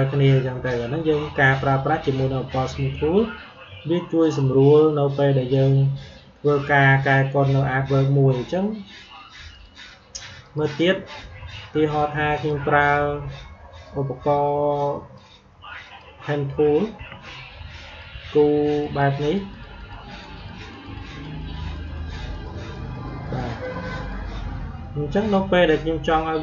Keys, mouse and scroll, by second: 9.4 click, 14.7 click, 17.7 click, 24.4 click.